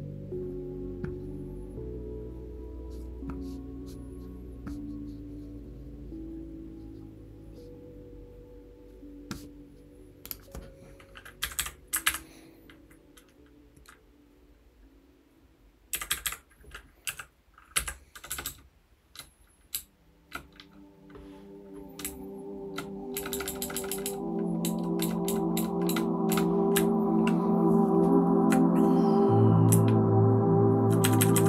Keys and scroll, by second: 11.4 Down, 11.5 Down, 12.0 Up, 15.9 Down, 16.1 Down, 16.2 Down, 17.0 a, 17.7 Right, 18.3 shift+Tab, 18.4-19.1 shift+Tab, 19.7-26.3 typing, 26.7 Up, 27.2-28.4 Up, 29.7-31.0 Up, 31.1 Up, 31.3 Up.